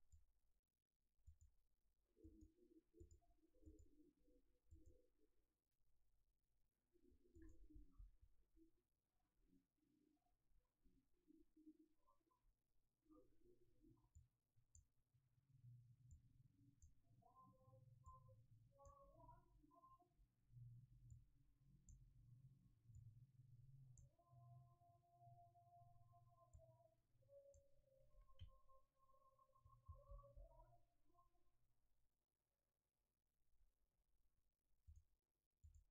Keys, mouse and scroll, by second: 7.7 x, 14.1 click, 16.1 click, 23.0 click, 26.5 click, 30.0 shift+a.